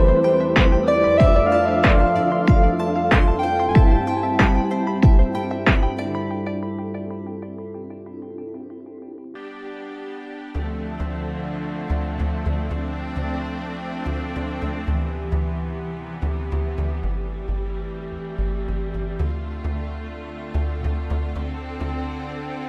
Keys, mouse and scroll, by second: 0.8 scroll up 1, 0.9-1.7 middle drag, 1.7-2.0 scroll down 1, 2.0-2.7 scroll up 1, 2.7 scroll up 1, 2.7-4.7 middle drag, 4.7 click, 6.2 click, 8.0 middle click, 9.0 Tab, 12.8 e, 14.5 Tab, 15.6-17.8 drag, 19.7-20.2 scroll down 3, 20.2-21.7 scroll up 2.